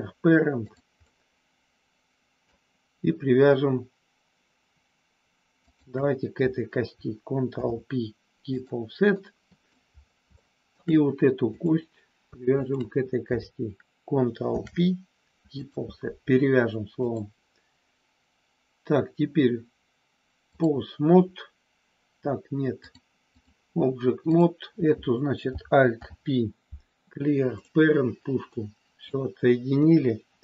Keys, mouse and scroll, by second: 0.9-2.5 middle drag, 7.5 ctrl+p, 9.2 middle click, 10.5 shift+middle click, 12.7 shift+click, 14.5 ctrl+p, 16.9-20.7 drag, 22.9 click, 25.8 alt+p, 28.5 middle click, 29.8 KP_1.